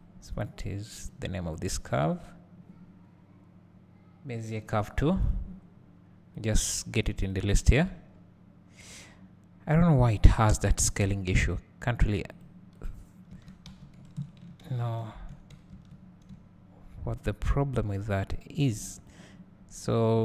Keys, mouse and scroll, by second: 0.5 click, 1.1 click, 1.6 click, 7.3-12.4 drag, 7.9-10.4 scroll down 2, 10.4-12.4 scroll down 1, 13.3 Tab, 13.7 a, 14.7 click, 14.7 shift+n, 16.3 `, 19.1 click.